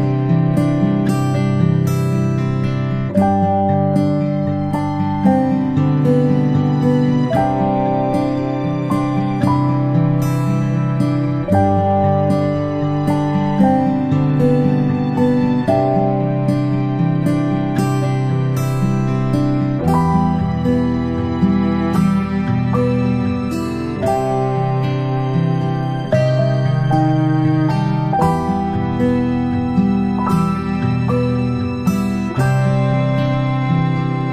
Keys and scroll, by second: 4.5-4.9 ctrl+space, 8.3 ctrl+z, 11.2 ctrl+c, 11.3 ctrl+v, 15.0 ctrl+shift+[, 15.2 ctrl+shift+], 19.0 ctrl+shift+[, 19.4 ctrl+], 20.6 g, 21.7 ctrl+z, 22.4 i, 23.6 i, 25.8 b, 27.6 typing, 29.6 i, 31.4 i.